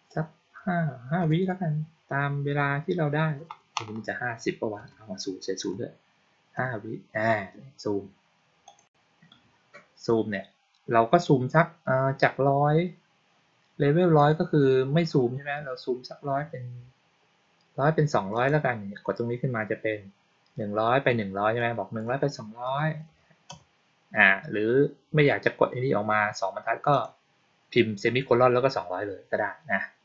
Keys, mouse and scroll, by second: 8.6 click, 14.1 click, 18.2 click, 21.5-21.9 drag, 26.8 click.